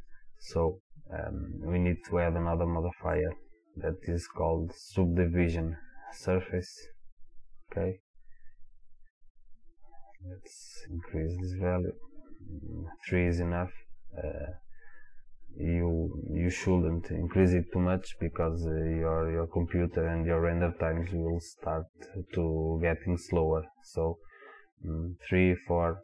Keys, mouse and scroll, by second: 3.1-11.3 drag, 11.8 click.